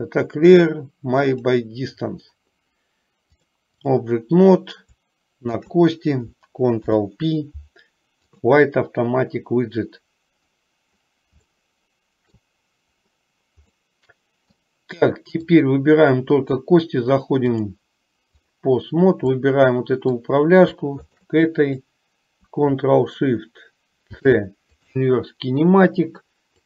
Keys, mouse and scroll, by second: 3.5 click, 5.7 shift+click, 6.9 ctrl+p, 11.8-12.7 shift+middle drag, 13.9-14.8 middle drag, 17.7-18.8 drag, 19.4-20.4 middle drag, 24.2 ctrl+shift+c.